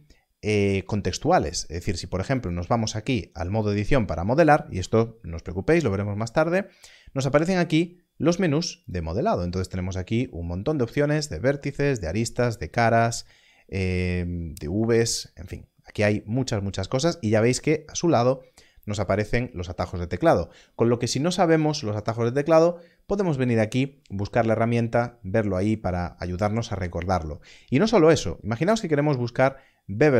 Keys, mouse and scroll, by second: 2.3 click, 8.8 click.